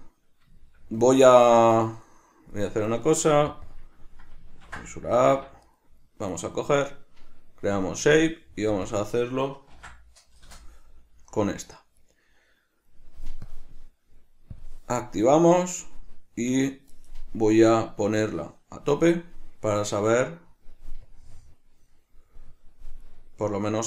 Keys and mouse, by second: 0.0 right click, 0.7-1.8 shift+middle drag, 1.8 right click, 3.6 click, 3.8-5.8 drag, 5.4 Escape, 5.8 right click, 7.9 click, 8.3 drag, 8.8 drag, 9.0-12.1 drag, 10.6 Return, 12.1 right click, 13.6-15.3 drag, 15.3 right click, 16.6 right click, 18.3-23.2 drag, 23.2 right click, 23.8 Tab.